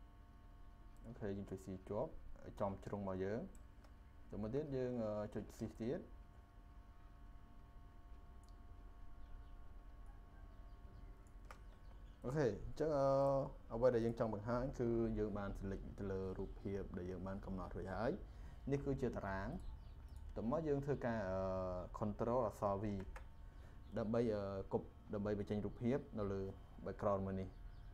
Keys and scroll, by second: 22.8 ctrl+v.